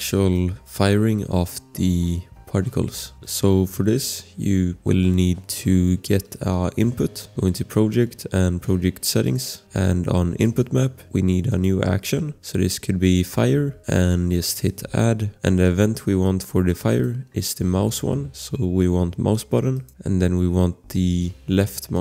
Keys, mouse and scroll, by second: 0.9 click, 3.2 click, 7.1 click, 12.1 click, 12.7-14.1 typing, 13.9 click, 15.3 click, 15.3 typing, 16.9 click, 21.9 click.